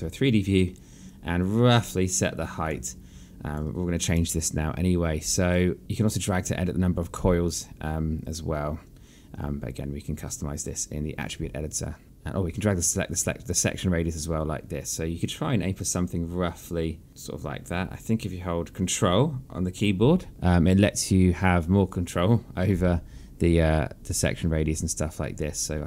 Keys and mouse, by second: 1.8 click, 3.6 alt+click, 6.1 click, 12.0 click, 18.5 ctrl+click.